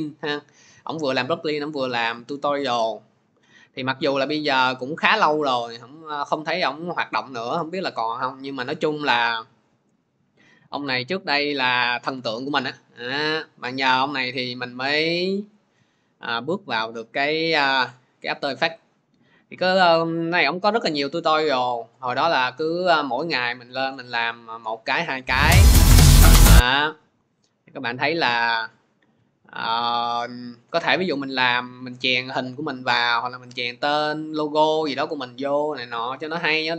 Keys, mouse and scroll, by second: 0.6-1.3 typing, 3.6-4.1 scroll, 6.9-7.5 scroll, 11.0-11.7 scroll, 12.5-13.2 scroll, 16.8-17.5 scroll, 18.2-19.5 scroll, 20.9 click, 24.5-24.8 scroll, 26.5-26.8 scroll, 28.3-28.8 scroll, 28.8 scroll, 32.9-33.4 scroll, 33.5 scroll down 8, 34.0-34.8 scroll up 7.